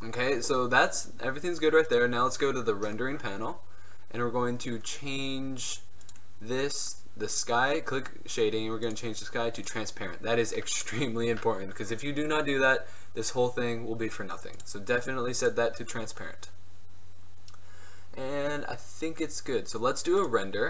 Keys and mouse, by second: 1.4-11.1 drag, 14.7-16.9 drag, 20.3 click.